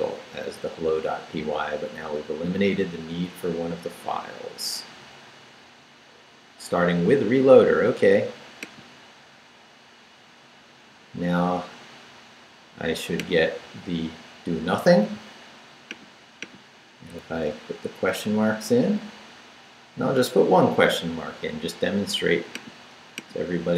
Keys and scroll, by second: 17.2 shift+/, 17.5 shift+Return, 18.4 Return.